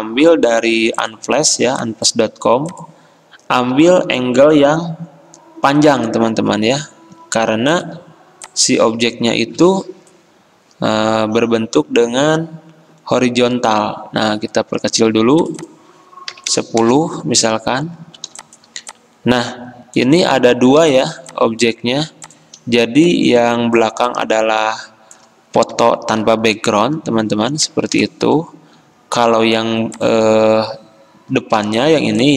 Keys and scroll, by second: 8.9 alt+Tab, 9.7 alt+Tab, 16.4 typing, 16.8 Return.